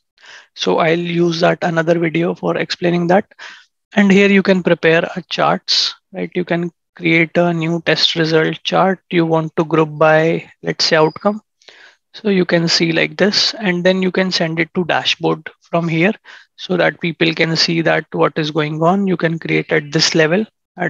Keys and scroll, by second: 0.9 ctrl+shift+@.